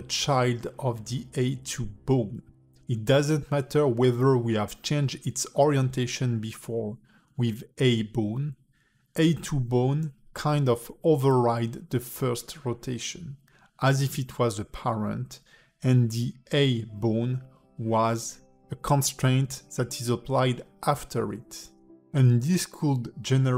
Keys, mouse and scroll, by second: 2.0 r, 5.8 click, 6.3 r, 7.9 r, 10.3 click, 10.8 r, 15.2 alt+middle click, 16.2 r, 18.2 alt+middle click, 19.8 click, 20.9 click, 21.3 click, 23.2 click.